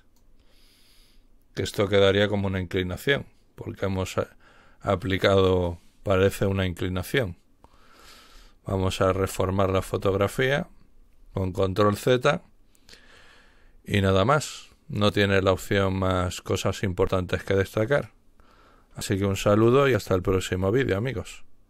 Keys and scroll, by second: 9.3 ctrl+z.